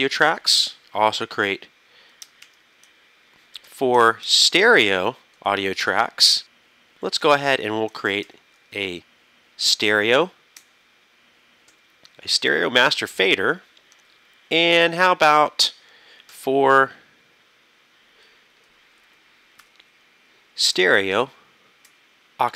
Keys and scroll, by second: 2.5 super+KP_Add, 3.7 KP_4, 4.3 super+Right, 8.3 super+KP_Add, 9.7 super+Right, 10.2 super+Down, 11.7 super+Left, 12.5 super+Down, 12.9 super+Up, 15.3 super+KP_Add, 16.3 super+KP_4, 16.3 KP_5, 19.7 KP_4, 21.2 super+Right, 21.9 super+Down.